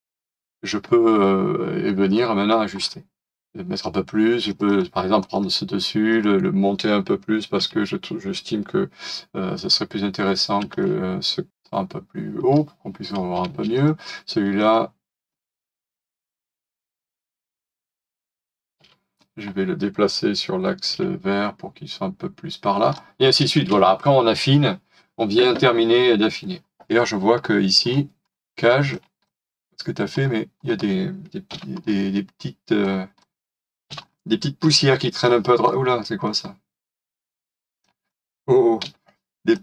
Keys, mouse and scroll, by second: 2.1 middle click, 2.7-3.3 scroll up 1, 4.6 double click, 7.6 typing, 10.7 alt+click, 11.5-13.4 typing, 15.7 double click, 18.8 m, 20.9 m, 26.9 scroll up 1, 29.1 m, 30.1-30.5 scroll down 1, 31.4 m, 31.8-33.7 scroll down 1, 34.0 scroll down 1, 34.6 middle click, 34.7 >, 35.7 middle click, 36.2-36.8 scroll up 1, 38.8 Delete.